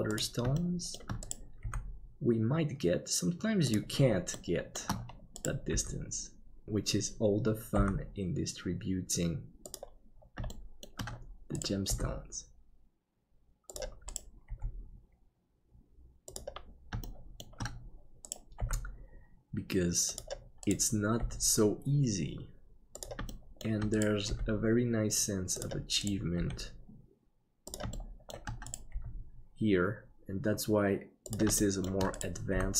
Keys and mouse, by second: 0.7 shift+middle click, 1.6 g, 4.4 shift+middle click, 5.5 right click, 5.7 g, 6.4 KP_7, 7.8 g, 10.6 shift+middle click, 11.9 g, 14.2 right click, 14.5 g, 17.1 shift+middle click, 18.6 g, 21.2 g, 23.4 middle click, 24.3 g, 26.4 g, 28.1 middle click, 28.9 g, 31.6 middle click, 32.6 g.